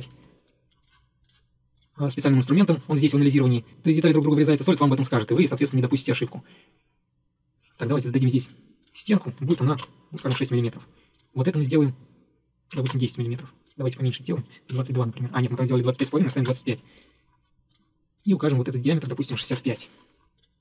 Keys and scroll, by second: 8.1 Escape, 9.6-10.8 typing, 12.6-13.3 typing, 14.8 typing, 16.1-16.4 typing, 16.6 Return, 19.2-20.0 typing.